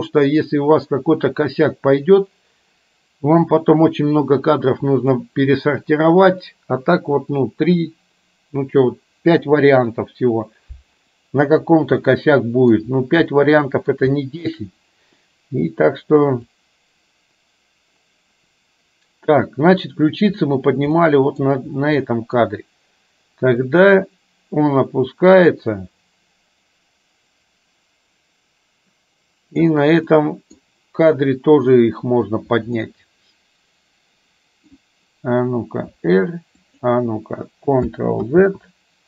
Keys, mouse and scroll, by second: 12.1-12.8 middle drag, 13.4 middle click, 14.3 shift+middle drag, 16.6-20.6 drag, 21.1 middle click, 22.2 middle click, 23.8-29.8 drag, 30.3 middle click, 32.9-34.8 middle drag, 36.1 r, 38.3 ctrl+z.